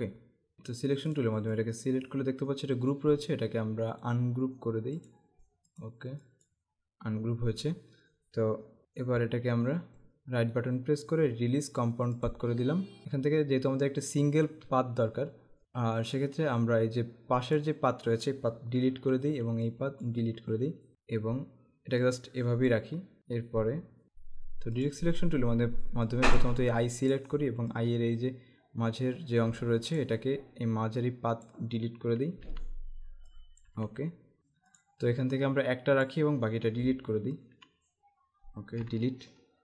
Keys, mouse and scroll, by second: 1.3 click, 4.1 right click, 5.0 click, 10.1 right click, 12.4 click, 16.3 click, 19.1 Delete, 19.6 click, 20.2 Delete, 22.1 click, 24.0 click, 24.9 click, 26.2 click, 32.4 Delete, 33.3 click, 33.7 Delete, 34.9 click, 37.6 Delete, 38.9 Delete.